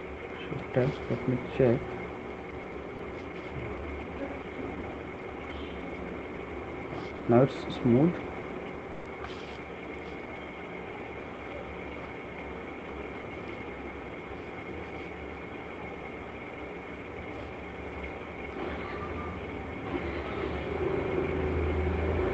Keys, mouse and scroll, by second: 0.5 right click, 0.5 f, 1.9 click, 2.6 click, 2.8 alt+click, 5.0 ctrl+d, 9.0 right click, 10.0-10.7 [, 13.0-15.3 typing, 14.2 click, 16.9 click, 17.1 click, 17.3 click, 17.9 [, 18.9 click, 19.7 click, 19.8 click, 20.6 click, 20.8 click, 21.3 click, 21.5 click, 21.7 click, 22.1 click.